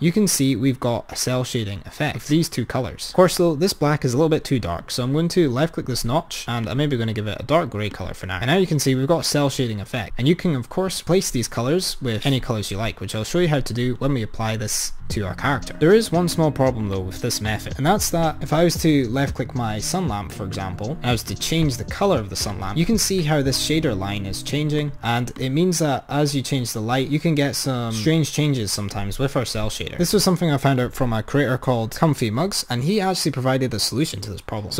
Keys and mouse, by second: 3.2-4.9 drag, 6.7 click, 8.4 click, 20.6 click, 21.4 click, 24.8 click.